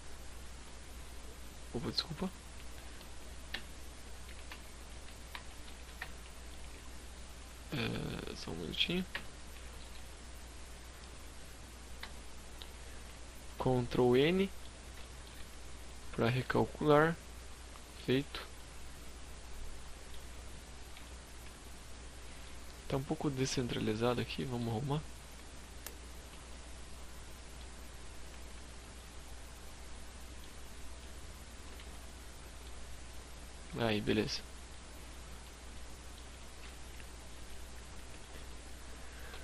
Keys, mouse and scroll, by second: 7.3 right click, 8.2 alt+m, 11.1 ctrl+n, 12.6 Tab, 12.8 scroll up 2, 13.1 middle click, 13.6-14.8 scroll down 6, 13.9 shift+middle click, 14.2 a, 14.7 middle click, 15.5 scroll up 3, 15.8 middle click, 17.1 shift+middle click, 17.5 middle click, 19.3-20.0 scroll up 10, 20.0 shift+middle click, 21.6 shift+right click, 22.3 shift+middle click, 24.3 click, 25.6 middle click, 26.6 scroll down 1, 27.2 click, 27.9 middle click, 29.9 click, 30.7 a, 30.9 middle click, 31.6-32.7 scroll down 15, 32.6 middle click, 33.2-33.7 scroll up 3, 33.5 middle click, 34.7 middle click, 36.0 KP_3, 36.4 KP_5, 37.0 z, 37.3-38.1 scroll up 8, 38.1 scroll down 4, 38.4 shift+middle click.